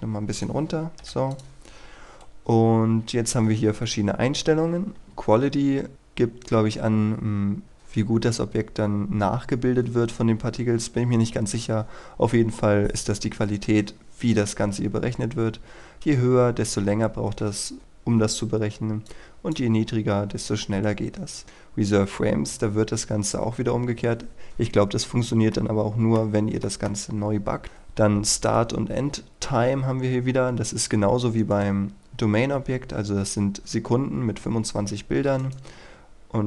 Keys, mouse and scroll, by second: 1.0 i, 1.2 click, 25.4 middle click, 31.4 right click.